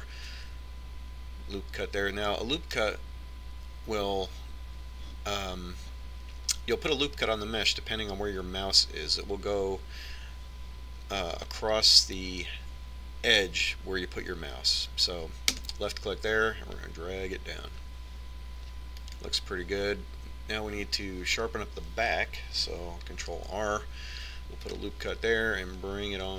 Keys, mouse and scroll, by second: 0.0 ctrl+r, 24.0 ctrl+r.